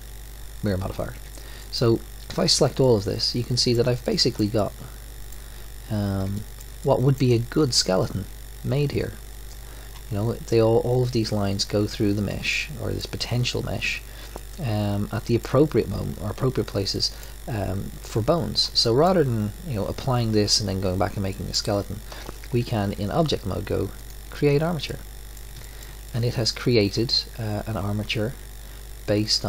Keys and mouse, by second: 1.1 Tab, 1.6 click, 2.3 a, 2.4 a, 6.3-11.6 middle drag, 12.5-22.3 middle drag, 22.5 Tab, 23.3-24.0 middle drag, 24.0 click, 24.8-25.8 middle drag, 28.9 middle click.